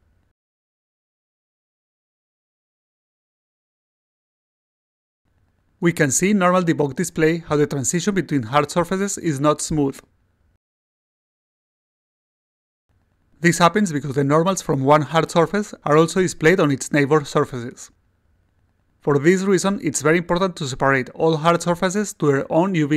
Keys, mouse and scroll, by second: 0.3-1.0 alt+middle drag, 6.0 click, 6.8 click, 8.4 click, 8.9 click, 14.8 click, 15.4 click, 16.2 click, 17.7-20.5 alt+drag.